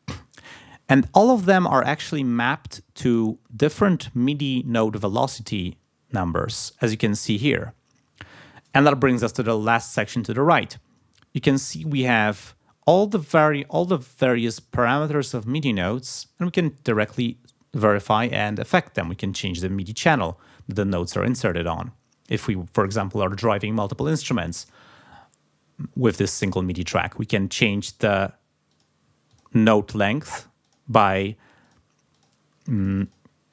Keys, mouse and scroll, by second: 1.3 click, 2.3 click, 18.4 click, 19.4 click, 28.7 click, 29.3 click, 30.1 click, 30.6 click, 31.6 click, 32.1 click, 32.8 click.